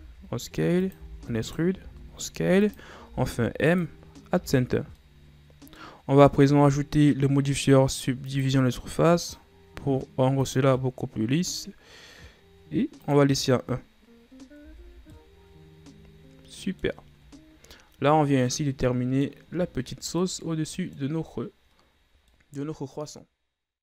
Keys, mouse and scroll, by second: 1.0 e, 1.9 s, 3.1 m, 4.4 Tab, 4.8 scroll down 4, 5.1-6.1 middle drag, 6.1-7.3 scroll up 2, 8.3 click, 9.3-12.4 drag, 13.1-14.7 drag, 14.7 a, 15.0 scroll down 1, 15.2-18.3 middle drag.